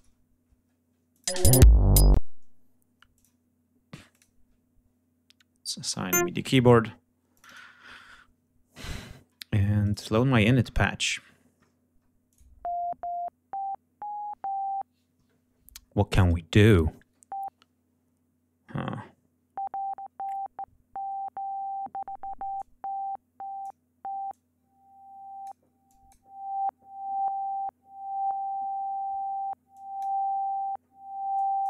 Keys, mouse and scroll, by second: 1.0 click, 1.2 space, 1.3 ctrl+scroll up 1, 2.0 ctrl+space, 3.0 click, 4.0 click, 5.7 click, 7.2 click, 9.7 click, 10.5-11.2 scroll down 1, 11.5-12.1 scroll down 1, 12.2 click, 22.5-23.7 drag, 24.2-25.5 drag, 25.8 click, 29.6 click, 31.3 click.